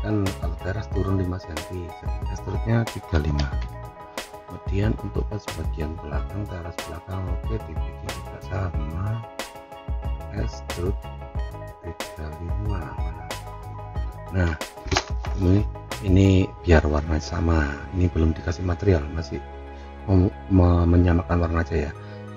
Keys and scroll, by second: 3.1 3.